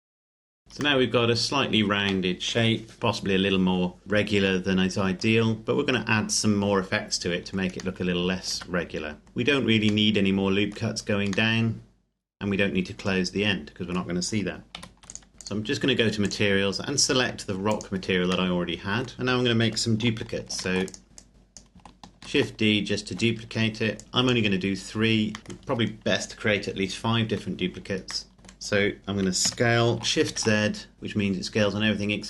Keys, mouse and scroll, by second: 0.0-0.5 scroll up 1, 0.5 click, 1.2 middle click, 5.5-8.0 scroll up 1, 8.0 middle click, 8.5 Tab, 9.2-10.1 scroll down 1, 10.1 middle click, 14.7 ctrl+s, 15.1 click, 18.5 middle click, 19.1-20.0 scroll down 1, 20.5 shift+d, 20.9 click, 22.1 shift+d, 23.4 Escape, 24.0 click, 25.4 middle click, 28.3 middle click, 29.5 s, 30.5 shift+z.